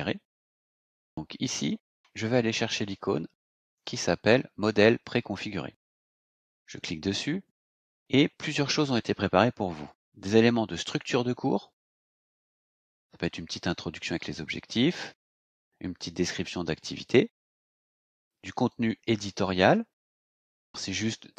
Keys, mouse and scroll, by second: 1.1 click, 6.4 click, 11.7 click, 18.7 click.